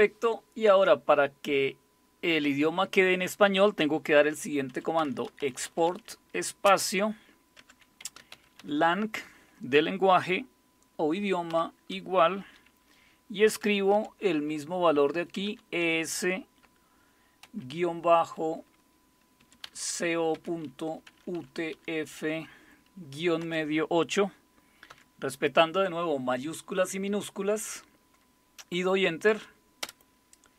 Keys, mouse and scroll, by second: 4.4-6.6 typing, 7.6 Caps_Lock, 7.8-9.1 typing, 11.3-12.0 typing, 13.7-14.4 typing, 15.5-15.8 typing, 17.4 typing, 19.4-22.2 typing, 23.4 typing, 24.9 typing, 29.8 Return.